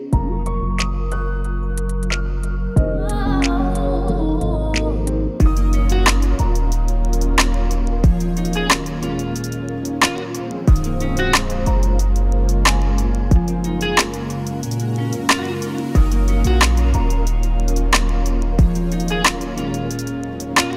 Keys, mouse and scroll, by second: 13.1 click, 14.1 ctrl+s, 14.5 click, 19.9 click.